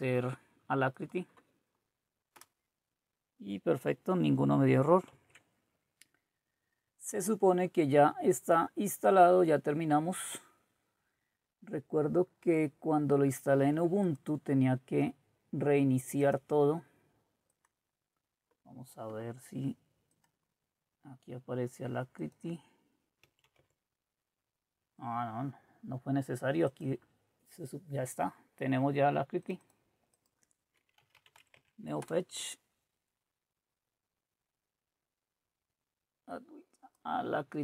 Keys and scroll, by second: 2.4 Return, 5.1 alt+Tab, 30.7-31.8 typing, 32.0 Return.